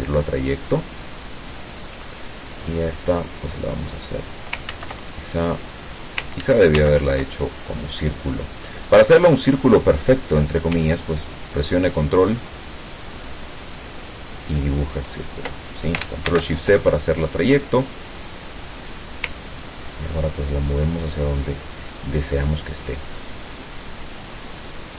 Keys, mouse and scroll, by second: 0.7 click, 3.1-4.7 drag, 4.7 ctrl+z, 6.5 ctrl+z, 8.7 click, 11.7-15.5 ctrl+drag, 16.3 ctrl+shift+c, 17.9 click, 18.7 click, 19.5-21.6 ctrl+drag, 22.7 click, 23.7-24.9 drag.